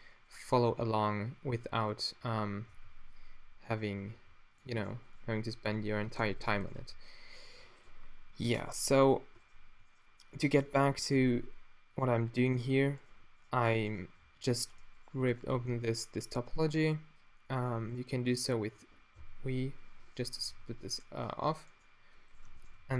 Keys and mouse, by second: 1.7 t, 2.7 v, 4.1 g, 5.6-8.5 drag, 5.6 v, 6.8 w, 9.4-10.0 drag, 11.1 v, 13.0-14.2 middle drag, 14.2 f, 15.6 f, 19.2 v, 20.5 z, 20.9-22.9 super+drag, 22.8 f.